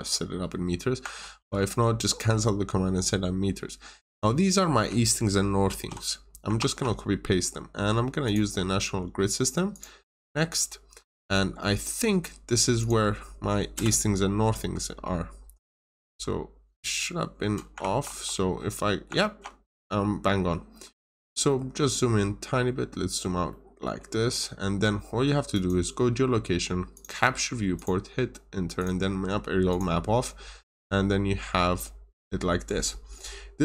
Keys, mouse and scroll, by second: 1.1 alt+Tab, 3.9 click, 5.6 ctrl+c, 6.5 alt+Tab, 8.2 click, 10.9-12.7 scroll up 1, 12.7 click, 13.7 Return, 15.8 scroll down 1, 17.7 alt+Tab, 19.1 alt+Tab, 19.8 scroll down 1, 20.3 middle click, 20.7 scroll up 1, 21.6 middle click, 22.1 scroll down 1, 23.4 middle click, 25.4 click, 30.0 scroll down 1, 30.6-31.4 scroll up 1, 32.7 middle click.